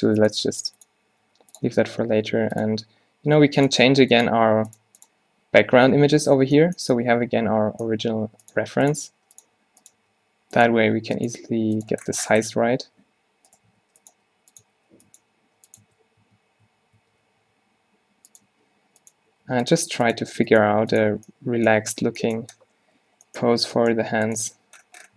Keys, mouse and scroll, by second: 0.0-1.1 typing, 6.7 middle click, 8.3-11.6 typing, 12.1 middle click, 12.6 s, 13.8 s, 14.3 g, 14.7 s, 15.3 g, 15.9 Tab, 16.3 Tab, 16.7 Tab, 17.1 Tab, 17.3 r, 18.6-21.2 typing, 22.0 Tab, 23.0 z, 23.5 Tab, 23.7 g, 24.5 Tab.